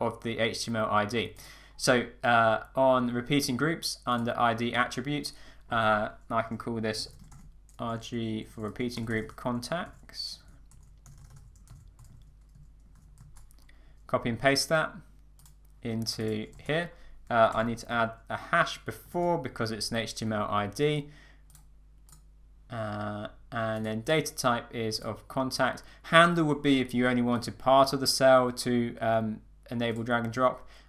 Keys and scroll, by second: 12.8 super+a, 13.2 super+c, 16.6 super+v, 17.5 Up, 19.1 alt+3.